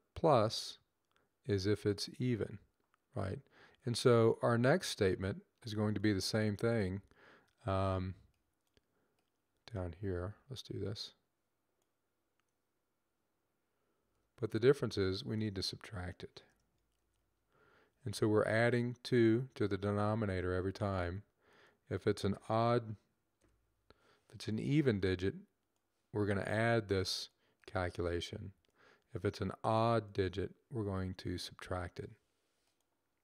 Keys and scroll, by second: 13.9 ctrl+c, 17.0 v, 23.2 space.